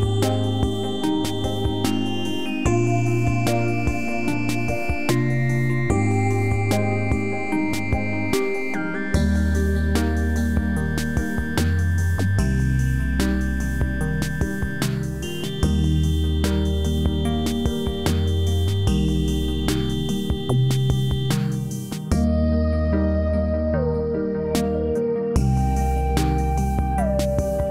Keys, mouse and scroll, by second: 4.4 f, 6.3 click, 7.1-8.0 alt+right drag, 9.7 click, 11.9-12.4 scroll up 1, 12.4 scroll down 1, 13.4 click, 15.8 click, 19.6-20.5 alt+right drag, 20.5-21.1 alt+middle drag, 21.8-22.7 alt+click, 22.9 alt+right click, 23.3 alt+middle click, 23.7-24.4 alt+right click, 24.5 alt+click, 24.9 alt+right click, 25.2 alt+middle click, 25.6-26.2 alt+click, 26.3 alt+right click, 26.8-27.7 alt+click, 27.4 alt+middle click.